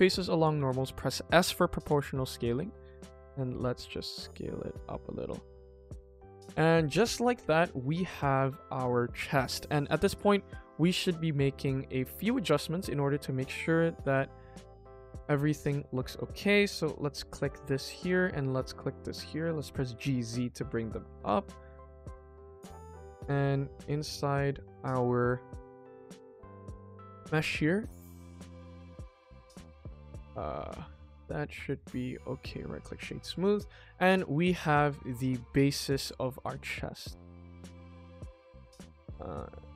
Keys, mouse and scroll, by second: 5.1-6.6 middle drag, 7.3 KP_1, 8.4 middle click, 9.6-13.8 middle drag, 14.6 middle click, 15.0 Tab, 15.6 middle drag, 15.9 Tab, 16.1 middle click, 16.9 click, 17.6 middle click, 18.3 middle click, 19.0 shift+click, 19.2 middle click, 19.9 g, 21.5-23.0 middle drag, 23.4 click, 23.7 click, 24.1 click, 24.4 middle click, 25.2 middle click, 25.6-26.2 scroll up 1, 26.2 click, 26.5 middle click, 26.9 click, 27.2 middle click, 28.0 g, 29.6 Tab, 29.9 click, 30.2 click, 30.5-31.7 middle drag, 31.9 middle click, 32.4 right click, 32.9 scroll down 1, 33.2 ctrl+s, 33.5 KP_1, 33.9 shift+middle click, 34.3 g, 35.6-36.0 middle drag, 36.0 KP_1, 36.4 s, 37.8 click, 38.1 middle click, 38.4 click, 38.6 scroll up 1, 38.7-39.7 middle drag.